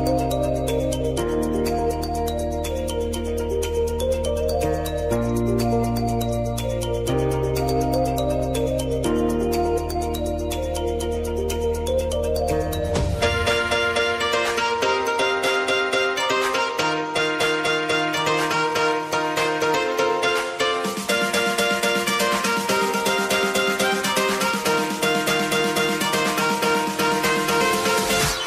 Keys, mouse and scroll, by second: 4.0 Down, 4.9 Left, 6.4 Up, 11.6 click, 13.6 ctrl+t, 13.9 click, 14.2 ctrl+a, 14.9 shift+k, 16.5 click, 17.4 ctrl+k, 18.7 shift+k, 19.1 Return, 21.3 click, 21.6 j, 23.1-25.0 drag, 25.8 v, 26.5-28.4 drag.